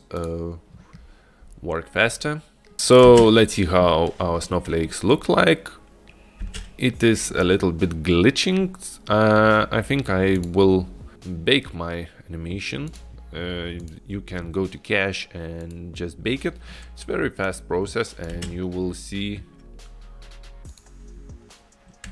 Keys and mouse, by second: 0.5 middle click, 2.7 click, 3.3 space, 7.1 space, 10.5 click, 11.1 click, 13.0 click, 13.9 click, 15.7 click, 17.8 click, 18.6 space, 20.9 click.